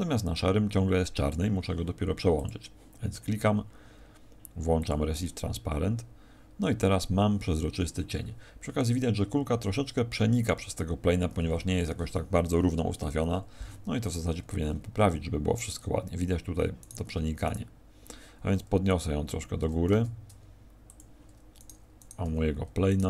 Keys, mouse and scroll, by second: 11.3 Escape, 12.5 KP_1, 14.2-14.9 scroll up 9, 16.8 right click, 16.8-17.3 scroll up 9, 17.4 right click, 19.6 g, 20.9 click, 21.5 right click, 21.9 right click, 22.2 z, 22.9 right click.